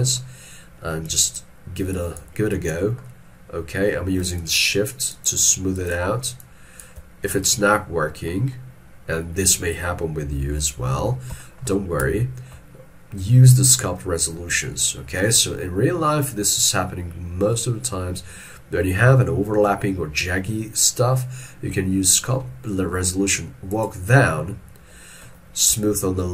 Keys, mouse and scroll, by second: 3.1 middle click, 4.4 shift+click, 5.3 shift+click, 5.9 shift+click, 6.5 shift+click, 7.4 middle click, 10.6 ctrl+middle click, 11.5 shift+middle click, 12.2 shift+middle click, 26.0 shift+click.